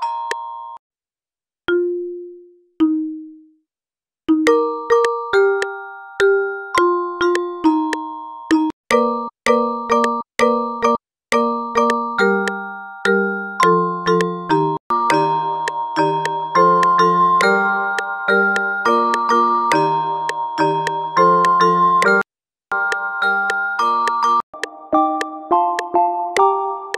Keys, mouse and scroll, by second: 15.8 drag, 19.4 click, 19.6 drag.